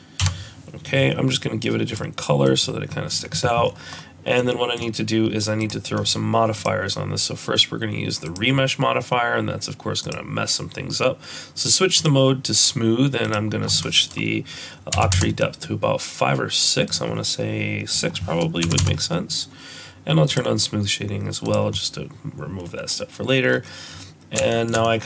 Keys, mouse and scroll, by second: 1.9 click, 3.1 click, 3.6 scroll down 2, 3.9-4.4 scroll up 3, 4.4 middle click, 5.6 click, 6.6 click, 10.0 click, 13.2 click, 16.9 click, 17.9 click, 21.0 click, 21.5 click, 22.6-23.2 scroll down 4, 23.2-23.9 scroll up 3, 24.0-24.4 scroll down 1, 24.5 shift+middle click, 24.9 middle click.